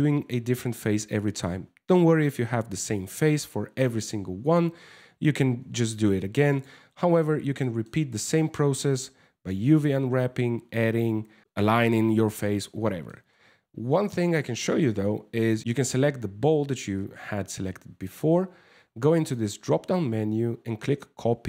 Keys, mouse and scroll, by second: 6.1 right click, 6.5 Tab, 7.2 shift+middle click, 7.8-8.3 scroll up 10, 10.7 scroll down 2, 11.9 Tab, 12.5 shift+middle click, 12.9 scroll up 2, 14.3 right click, 18.8 click.